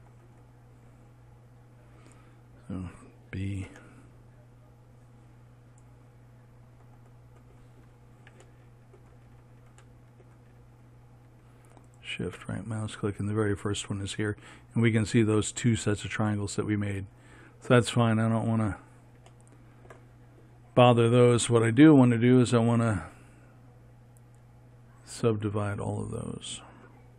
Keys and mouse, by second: 4.2 b, 12.4-17.6 right drag, 17.7-25.7 middle drag, 25.7-27.1 drag.